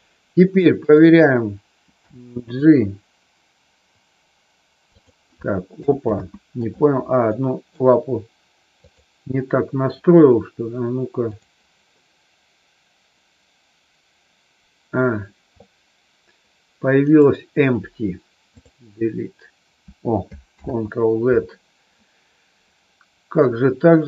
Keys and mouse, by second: 0.7 click, 2.0 g, 4.9 click, 6.0 ctrl+z, 7.2 middle click, 11.2 click, 20.6 ctrl+z.